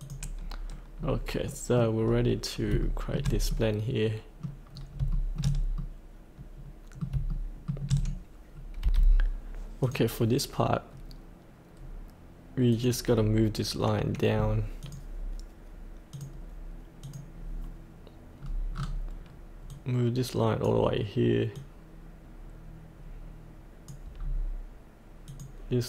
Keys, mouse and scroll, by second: 0.0 click, 1.4 middle click, 1.9 scroll down 1, 2.5 scroll up 1, 2.8 shift+middle click, 3.5-4.7 middle drag, 4.8 scroll down 1, 5.1-7.1 shift+middle drag, 7.3 shift+middle click, 8.8 F8, 9.8 click, 10.8-11.7 scroll down 1, 11.7-12.7 scroll up 1, 12.7 click, 13.1-14.8 scroll down 1, 14.8 click, 18.3-18.7 scroll down 1, 19.7-24.2 drag, 24.2-25.3 scroll down 1, 25.3-25.8 drag.